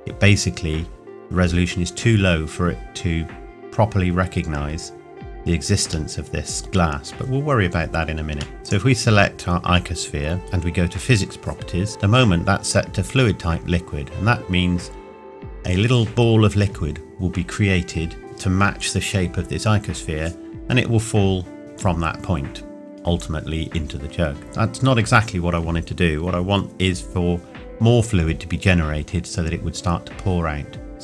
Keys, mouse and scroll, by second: 2.5-4.0 scroll up 1, 6.2 middle click, 8.6 click.